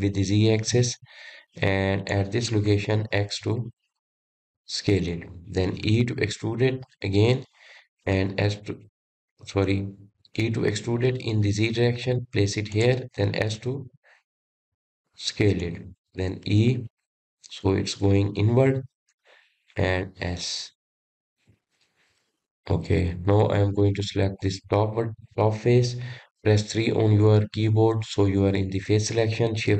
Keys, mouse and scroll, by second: 3.8 s, 6.9 e, 11.5 e, 14.7 s, 17.6 e, 20.9 s, 22.7 click, 23.8-25.5 middle drag, 25.5 click, 28.9 3.